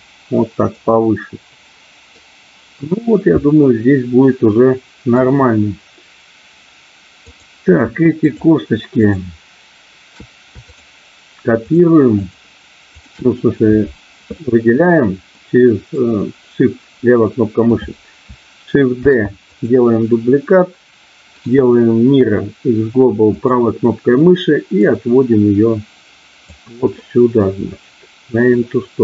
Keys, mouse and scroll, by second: 0.5 click, 0.9-1.9 scroll up 1, 1.9 middle click, 2.9-5.1 middle drag, 7.3 click, 8.1 shift+click, 9.0 shift+click, 10.6 shift+click, 11.6 shift+click, 12.1 shift+click, 12.9 shift+click, 14.4 middle click, 15.4 middle click, 19.0 shift+d, 19.4 click, 21.4-23.5 right drag, 24.8-26.4 drag, 27.0-28.0 scroll up 1, 28.0-29.0 middle drag.